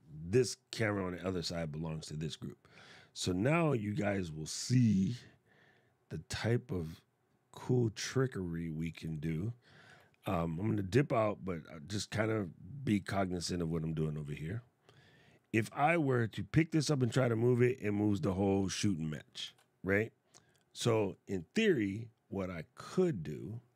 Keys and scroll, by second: 19.1 super+z.